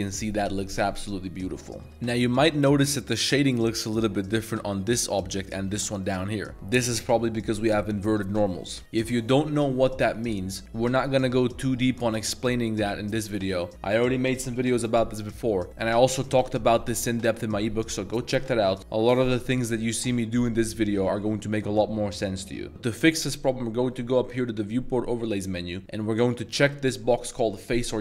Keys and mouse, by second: 0.6 middle drag, 1.3-3.7 middle drag, 1.9 a, 4.3 click, 4.6 g, 5.4 click, 5.7 g, 6.2 a, 6.3 a, 6.5 middle click, 8.8 Tab, 9.0 middle click, 16.0 middle click, 16.4 click, 20.8-21.2 middle drag, 22.7 click, 24.4-28.0 drag.